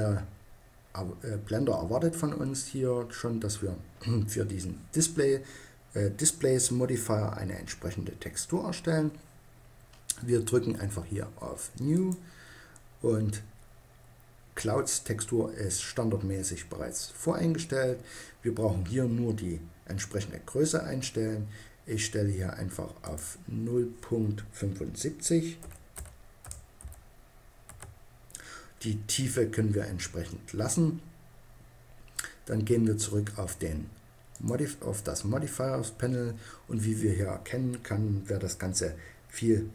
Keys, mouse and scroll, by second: 11.5-13.3 drag, 22.6-24.6 drag, 33.9-35.7 drag, 37.7-39.7 middle drag.